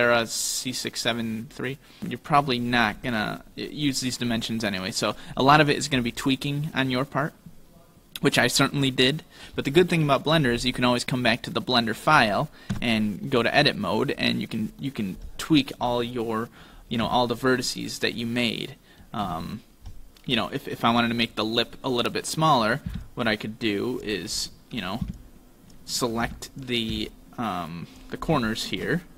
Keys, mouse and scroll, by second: 6.8 middle click, 9.3 shift+middle click, 11.2 right click, 12.8 Tab, 13.3 middle click, 14.9 middle click, 16.0 KP_7, 17.1 z, 18.2 middle click, 19.3 a, 20.0 KP_5, 20.0 KP_1, 20.0 KP_7, 22.9 b, 25.1 v, 26.9 b, 28.6 shift+middle click.